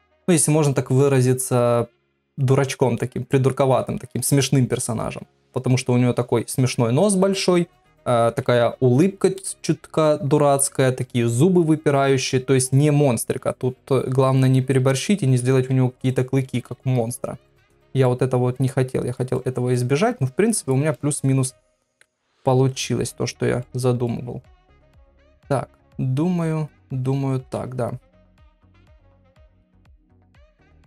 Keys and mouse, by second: 12.1 KP_3, 16.5 shift+d, 17.7 middle click, 18.6 click, 19.3 middle click, 20.2 click, 20.9 middle click, 21.9 KP_1, 23.0 click, 23.6 middle click, 24.5 middle click, 26.7 click, 27.4 KP_1, 28.5 r, 29.6 g, 30.6 click.